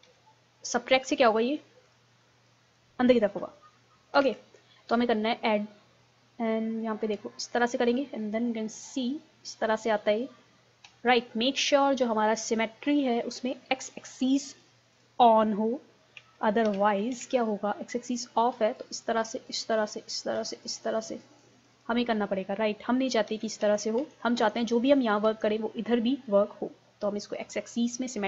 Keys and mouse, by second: 0.1 ctrl+super+z, 1.3 click, 4.2 ctrl+z, 7.5-8.6 drag, 8.6 middle click, 11.1 KP_1, 12.5-16.5 drag, 17.2 ctrl+z, 18.1-23.0 drag, 23.0 ctrl+z, 23.4 ctrl+z, 23.7 ctrl+z, 24.0 ctrl+z, 24.4 ctrl+z, 25.3 ctrl+z, 27.4-28.2 drag.